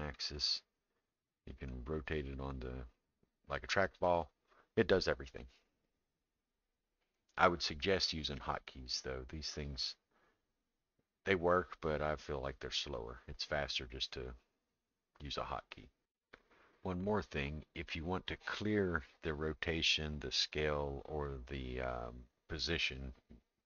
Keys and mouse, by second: 1.5-4.0 drag, 12.8 middle click.